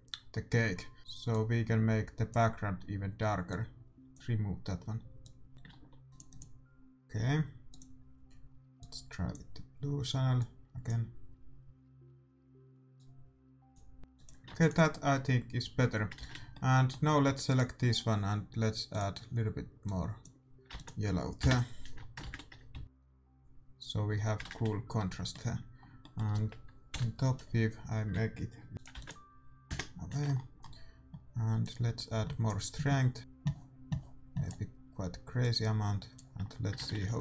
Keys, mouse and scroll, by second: 3.8-12.5 drag, 5.9 ctrl+s, 13.3 click, 14.4-16.5 drag, 14.7 ctrl+s, 16.3 shift+z, 19.4-20.7 drag, 20.7 ctrl+s, 21.4 KP_0, 21.9 middle click, 24.7 middle click, 24.7 shift+z, 26.9 KP_7, 28.7 g, 28.9 ctrl+s, 29.6 KP_0, 30.2-32.3 middle drag, 31.6-33.8 drag, 35.4-37.2 drag.